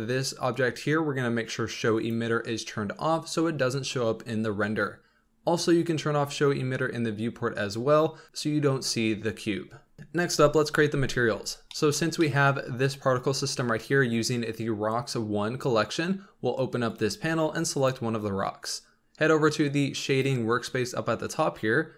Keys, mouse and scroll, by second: 7.1 click, 11.0-11.6 scroll down 1, 11.7-12.4 shift+middle drag, 12.4 scroll up 1, 16.9 click, 17.7 click, 19.0 middle click.